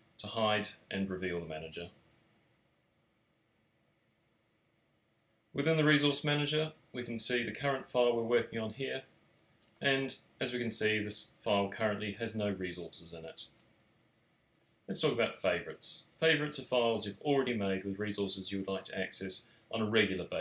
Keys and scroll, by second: 2.2 super+r.